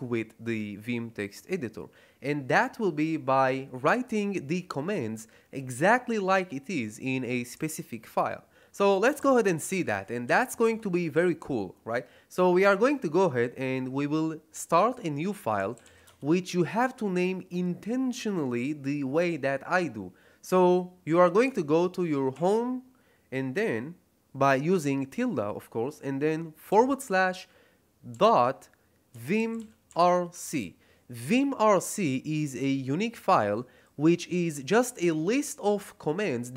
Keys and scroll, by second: 7.5 Escape, 9.1 shift+;, 9.5 q, 10.2 shift+1, 10.6 Return, 15.3-16.3 typing, 22.3 shift+`, 26.6 /, 28.0-30.4 typing.